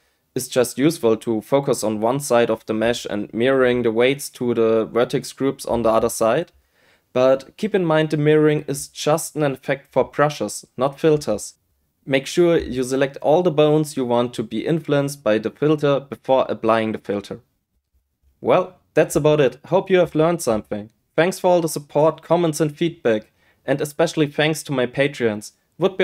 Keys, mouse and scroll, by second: 0.0 shift+click, 0.5 shift+click.